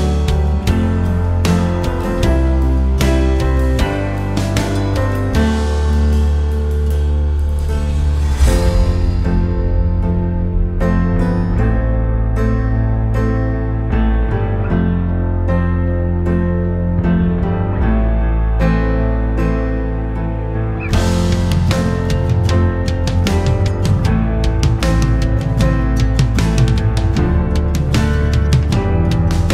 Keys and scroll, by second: 17.9 5, 18.3 Return.